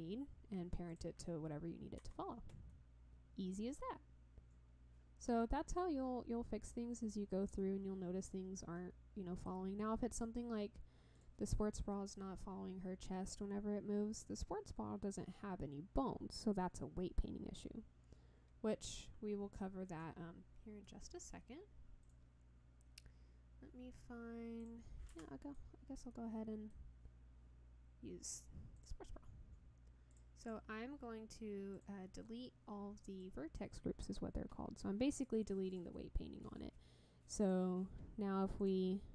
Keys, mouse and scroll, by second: 0.9 click, 2.1 Tab, 2.7-5.4 middle drag, 5.9 scroll down 2, 7.6-9.4 middle drag, 11.1 click, 22.0 click, 24.6 click, 25.1 ctrl+middle click, 25.7-26.1 scroll down 3, 26.1 middle click, 28.7 click, 30.1 click, 30.4-31.8 drag, 33.2 click, 35.7 click, 36.5 scroll up 2, 37.4 drag, 38.6 click.